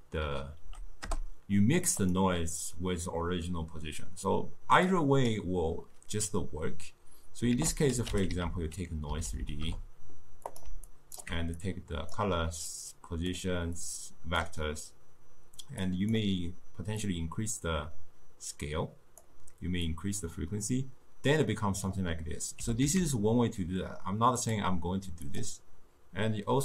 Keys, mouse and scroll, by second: 4.9 click, 7.6 ctrl+a, 9.3 Down, 9.4 Down, 10.9-11.6 alt+right drag, 11.6-12.8 drag, 13.8 drag, 15.9 click, 17.1-22.6 drag, 22.6 g, 25.3 click.